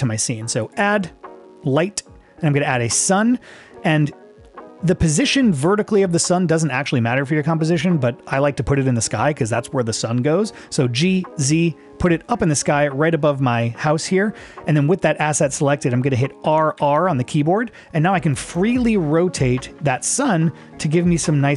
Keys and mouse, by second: 0.8-3.2 drag, 11.0 g, 11.5 z, 16.5 r, 16.8 r.